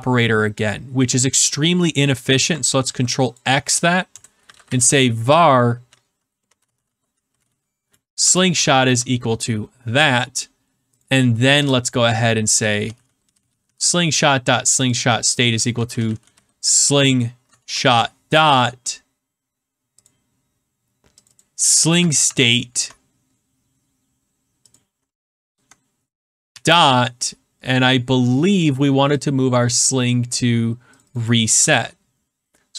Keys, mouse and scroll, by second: 1.7 click, 2.8 ctrl+x, 3.3 click, 4.1 Return, 4.2-8.1 typing, 8.6 ctrl+v, 10.9 click, 11.5-14.1 typing, 14.8 click, 15.5-18.1 typing, 20.0 click, 20.4-21.0 scroll, 21.2 click, 21.3 click, 21.8 ctrl+c, 22.2 alt+Tab, 22.5 ctrl+c, 24.7 click, 25.4 ctrl+v, 29.1 click, 30.9 click, 31.1 click, 31.7 ctrl+c.